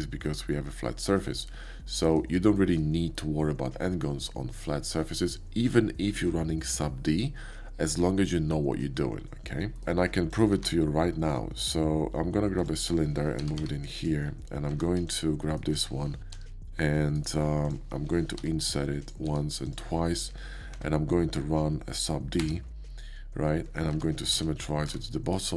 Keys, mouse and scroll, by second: 0.0 shift+scroll up 1, 0.2-2.1 shift+middle drag, 2.5 shift+middle drag, 3.1 middle click, 3.7 middle click, 9.7 middle click, 10.3 click, 10.5 shift+a, 12.6 click, 13.4 g, 13.5 y, 13.6 g, 14.0 click, 14.6 middle click, 14.7 Tab, 15.1 click, 20.7 Tab, 23.1 ctrl+3, 23.9 Tab, 24.3 alt+x, 24.8 Tab, 25.3 right click.